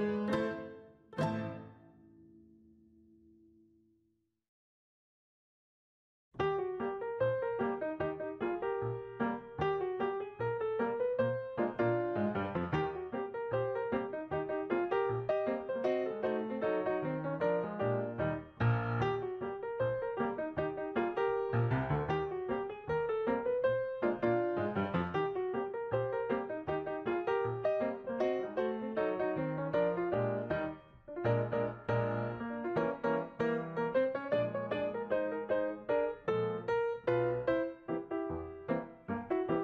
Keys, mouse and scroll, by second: 12.6 ctrl+s, 18.1 double click, 18.4 double click, 19.6 double click, 22.8 double click, 23.0 double click, 24.7 double click, 31.4 right click.